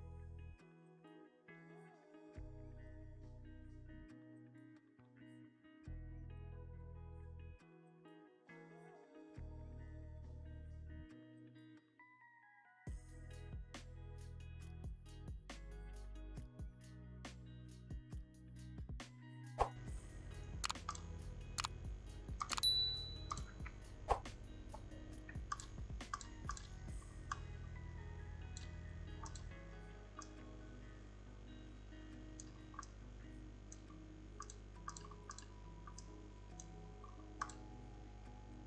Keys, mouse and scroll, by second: 19.7-21.1 drag, 26.5-30.4 drag, 34.7-38.6 drag.